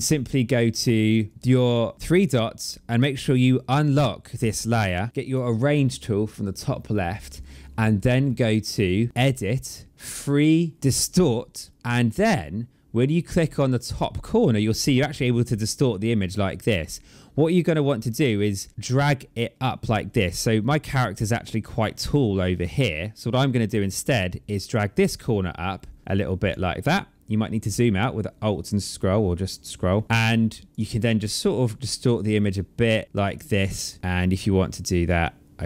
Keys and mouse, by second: 1.2 click, 1.5 click, 2.0 click, 4.2 click, 9.1 click, 12.9 click, 24.5 click, 30.0 click, 31.4 click, 34.0 click.